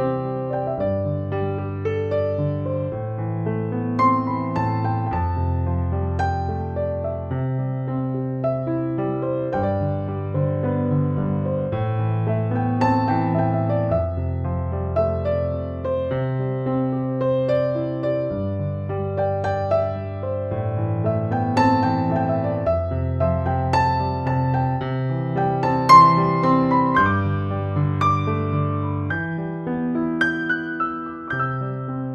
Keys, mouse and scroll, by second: 3.5 space, 3.6-4.2 click, 4.0 space, 4.4 click, 5.0 ctrl+z, 5.3-8.1 drag, 10.2 space, 10.2-10.9 click, 10.9 space, 11.2 ctrl+-, 12.9 ctrl+=, 14.1-16.0 typing, 14.2-14.8 click, 16.1-17.7 drag, 19.0 space, 19.2-19.8 click, 19.5 space, 20.0-21.2 drag, 23.0 ctrl+z, 27.4 click, 27.7 e, 28.5-29.6 [, 29.9-30.5 click, 31.0 ctrl+z, 31.9 x.